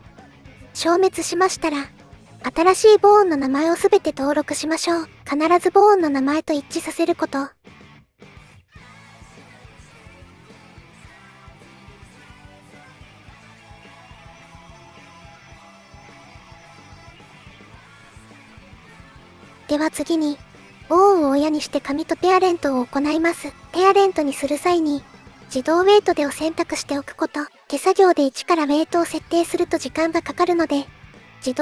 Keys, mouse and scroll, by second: 0.5 click, 0.8 click, 1.7-4.1 drag, 4.5-8.8 drag, 9.2 click, 10.6 click, 10.7 shift+click, 11.1 ctrl+click, 11.4 ctrl+click, 12.3 ctrl+click, 13.0 ctrl+click, 13.5 ctrl+click, 14.6 ctrl+click, 15.2 ctrl+click, 16.2 ctrl+click, 16.5 ctrl+click, 17.1 ctrl+click, 17.6 ctrl+click, 18.2 ctrl+click, 19.0 click, 21.3 click, 21.8 middle click, 22.1 shift+click, 23.4 ctrl+p.